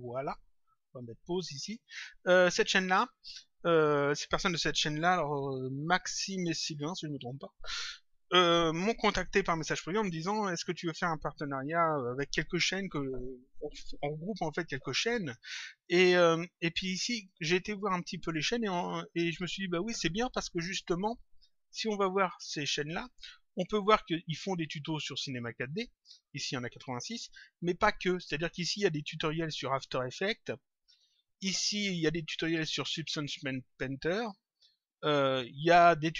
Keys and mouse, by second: 1.2 click, 21.4 click.